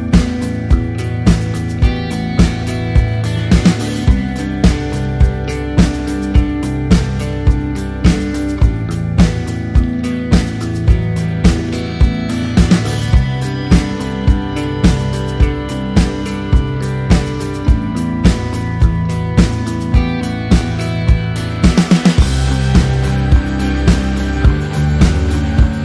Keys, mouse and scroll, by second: 2.2-9.3 typing, 10.2 click, 13.1 KP_7, 15.5 click, 18.3 -, 19.2 click, 23.4 click.